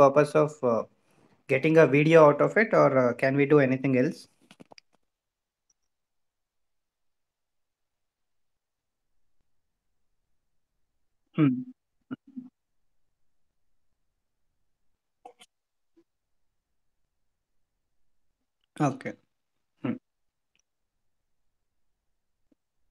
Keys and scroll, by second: 22.1 ctrl+z.